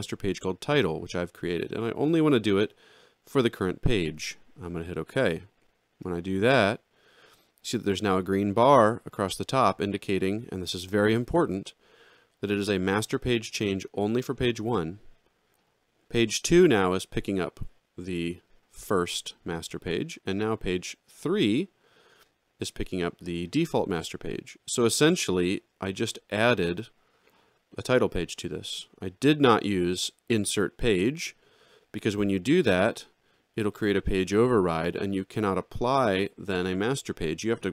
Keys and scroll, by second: 29.5 alt+x.